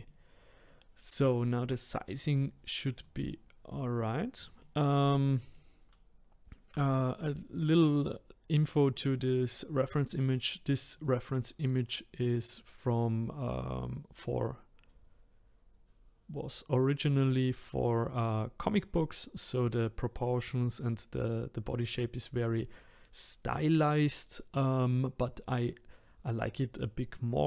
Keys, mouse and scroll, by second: 2.9 click, 3.7-4.9 middle drag, 4.9 click, 5.3 middle click, 5.8-6.8 scroll up 4, 6.8-8.9 shift+middle drag, 8.9 scroll down 2, 10.9 click, 11.7-12.1 scroll up 2, 16.4-17.5 scroll down 1, 19.9-22.8 scroll up 1.